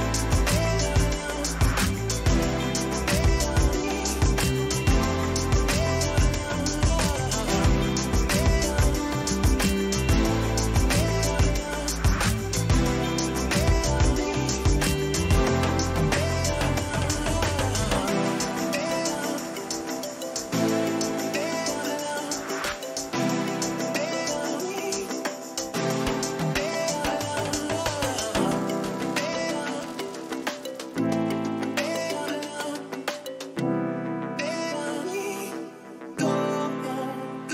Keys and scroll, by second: 2.9 Return, 3.9 Left, 5.9 ctrl++, 6.4 ctrl+-, 9.5 ctrl++, 15.3 ctrl+v, 17.2 ctrl+v, 22.4 space, 24.1 ctrl+v, 26.4 Delete, 27.1 Return, 31.8 ctrl+-, 35.7 Return.